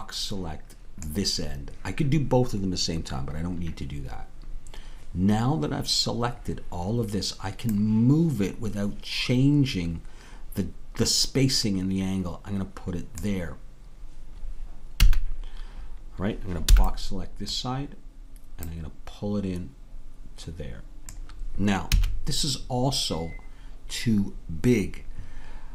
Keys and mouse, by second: 7.8-13.2 drag, 15.0 a, 18.6-21.1 drag, 21.9 a.